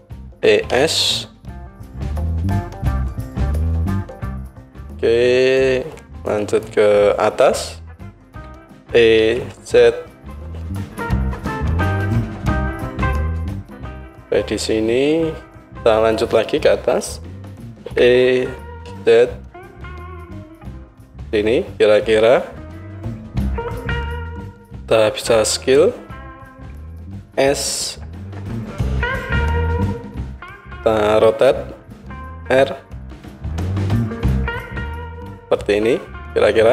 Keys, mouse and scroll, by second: 0.3 e, 4.4-6.3 middle drag, 6.3-12.4 drag, 8.3 e, 12.4-13.5 middle drag, 13.5-21.0 drag, 17.9 e, 21.0-36.7 middle drag, 27.2 s, 32.0 r.